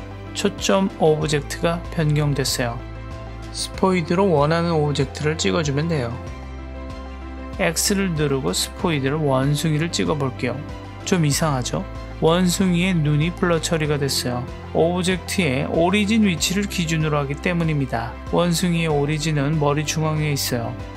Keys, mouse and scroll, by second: 3.9 click, 4.4 click, 8.1 click, 9.0 click, 14.5 click.